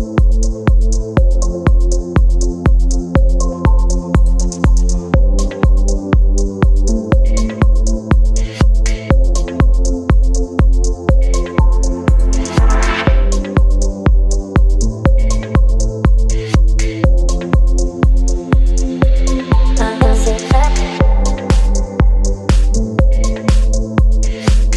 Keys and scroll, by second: 0.3 space, 3.6 ], 3.8 ], 5.3 space, 6.9 space, 8.3-9.3 typing, 12.8-13.9 typing, 15.8 [, 16.0 [, 16.3 ], 19.2 [, 19.4 [, 20.0 [.